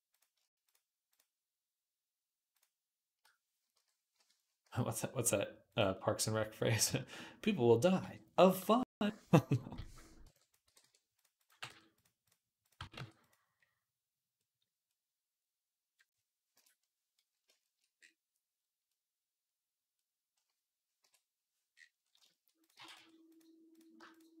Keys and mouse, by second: 0.9 shift+click, 4.5 s, 9.6 z, 10.1 b, 10.5 g, 11.0-12.1 middle drag, 11.3 g, 12.1 click, 12.5-14.8 middle drag, 12.6 g, 16.4 KP_7, 18.0-23.9 middle drag, 20.9 KP_7, 22.6 g, 23.9 shift+click, 24.0 shift+middle click, 24.3-24.4 drag.